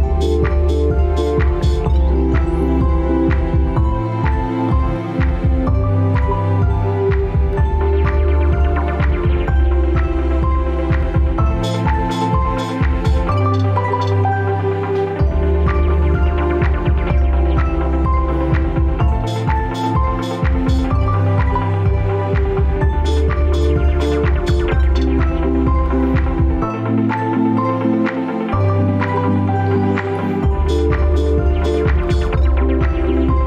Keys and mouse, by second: 0.7-3.1 drag, 4.5-9.9 drag, 16.3 right click, 19.5 ctrl+z, 19.9 ctrl+z, 21.8-25.6 drag, 27.4 KP_Enter, 28.6-31.5 drag, 33.3 KP_Enter.